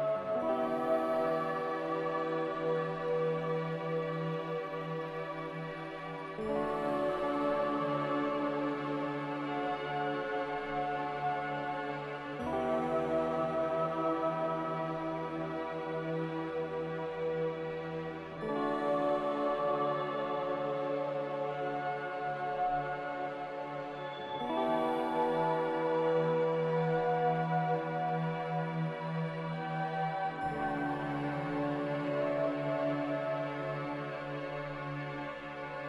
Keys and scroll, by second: 7.5 m, 25.7 g, 28.2 z, 28.9 a, 30.1 ctrl+z, 34.0 ctrl+z.